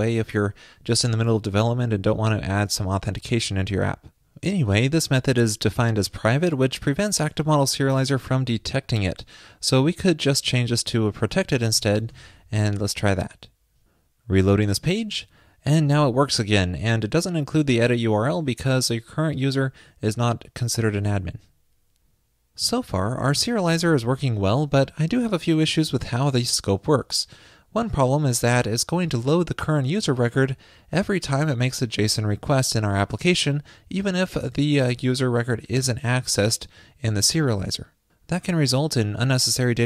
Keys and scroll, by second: 12.2 super+s.